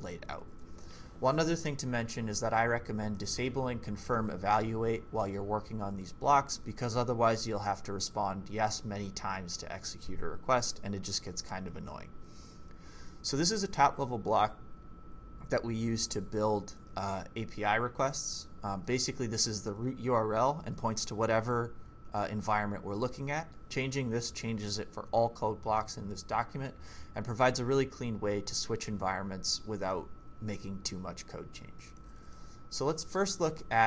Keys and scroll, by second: 1.9-2.5 typing, 12.7-13.8 typing, 32.0-33.4 typing.